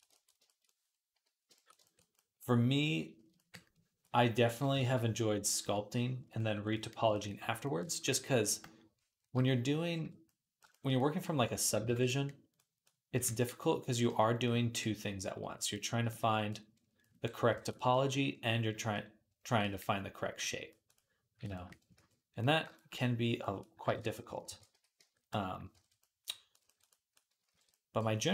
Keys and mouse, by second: 1.5-6.4 ctrl+middle drag, 2.7-6.6 drag, 2.7-6.6 right drag, 4.7 ctrl+z, 6.6 click, 6.6 middle click, 6.6 right click, 6.9-9.2 ctrl+drag, 7.1 ctrl+z, 11.7 alt+q, 13.0 j, 19.5 middle click, 21.6 alt+middle click, 21.8 alt+q, 22.8 middle click, 23.7 ctrl+Tab, 24.3 ctrl+a, 25.5 ctrl+Tab, 25.9-27.2 drag, 27.4 alt+q.